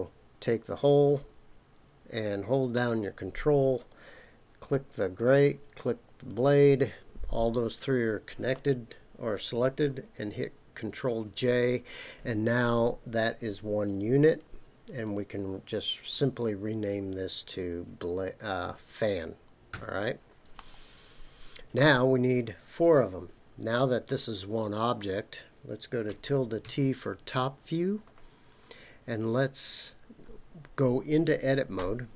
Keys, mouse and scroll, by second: 0.8 click, 5.1 ctrl+click, 6.3 ctrl+click, 11.2 ctrl+j, 14.3 click, 14.8 click, 15.0-19.9 drag, 18.0 BackSpace, 18.5 BackSpace, 20.5-21.8 middle drag, 28.1-29.8 scroll down 3, 31.8 Tab.